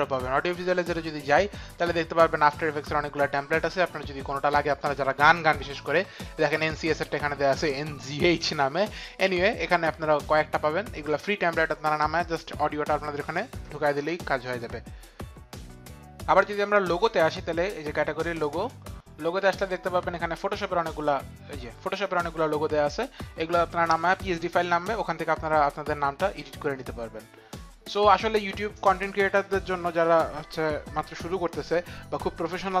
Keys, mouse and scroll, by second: 0.1 click, 18.3 click.